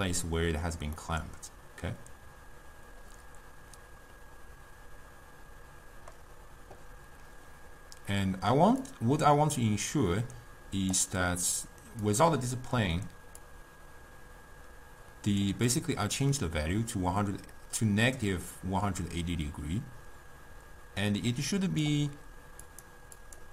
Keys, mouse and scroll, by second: 8.9-12.0 drag, 12.1 click, 13.5-16.7 drag, 16.9-19.9 drag, 22.7 click, 23.3 click.